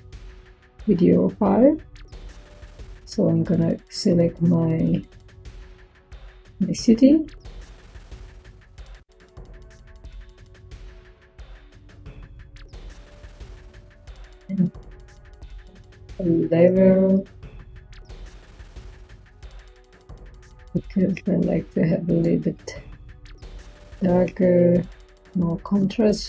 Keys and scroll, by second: 14.7 Tab, 15.8-17.2 typing.